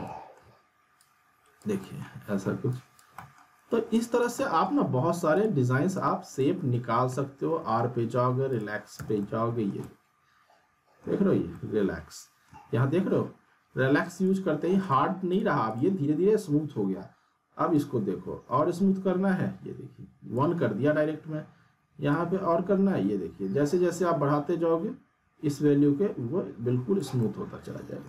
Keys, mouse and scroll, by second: 1.0-1.6 click, 1.8 middle click, 2.3-2.7 scroll down 1, 2.7 click, 3.1 middle click, 3.9 click, 4.3 middle click, 5.3 click, 7.5 r, 8.5 click, 8.9 z, 9.2-11.1 alt+middle click, 9.6 scroll down 1, 9.8-11.4 alt+middle drag, 11.4 scroll up 1, 11.5-12.7 alt+middle drag, 12.2-12.7 alt+middle drag, 14.2-20.6 drag, 27.2-28.0 alt+middle click.